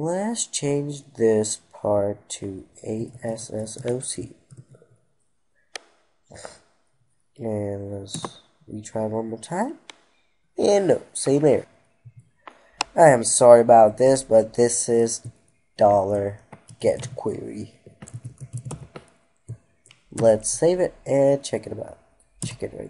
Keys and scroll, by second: 4.2 ctrl+s, 11.5 F2, 19.8 ctrl+s.